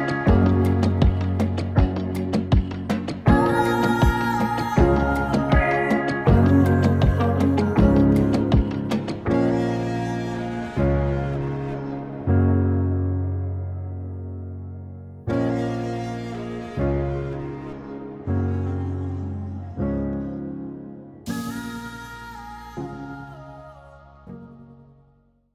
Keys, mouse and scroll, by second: 1.8 space, 4.1-7.8 drag, 7.8 space.